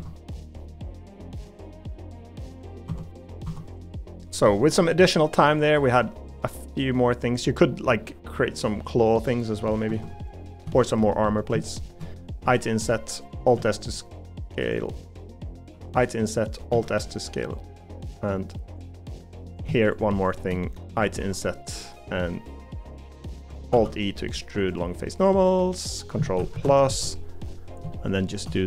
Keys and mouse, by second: 0.6 middle click, 1.5 middle click, 2.3 middle click, 4.4-6.9 middle drag, 7.3 middle click, 7.9-9.7 middle drag, 9.9 Tab, 12.4 i, 13.5 alt+s, 15.7 i, 16.7 alt+s, 17.9 middle click, 19.0 middle click, 22.3 middle click, 23.2 middle click, 23.7 alt+e, 26.5 ctrl+KP_Add, 27.9 shift+middle click.